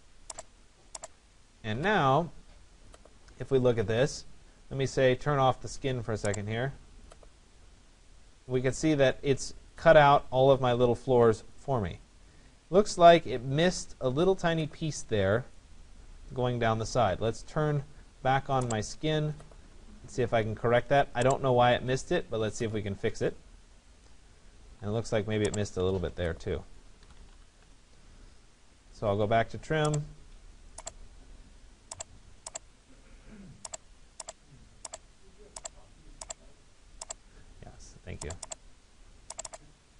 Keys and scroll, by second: 1.8 Delete, 27.3 Return.